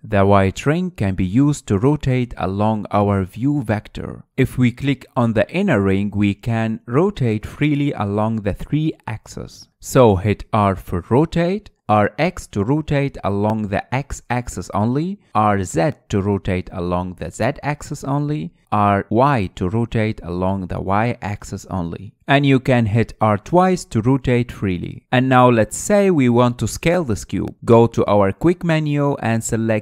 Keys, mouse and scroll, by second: 0.2 ctrl+z, 0.6 ctrl+z, 0.9 ctrl+z, 2.1 click, 4.8 ctrl+z, 6.3-9.3 drag, 10.4 ctrl+z, 12.4 r, 14.1 r, 17.0 r, 20.4 r, 24.8 r, 26.9-28.3 middle drag, 28.3-28.7 scroll down 2, 28.7-29.8 middle drag.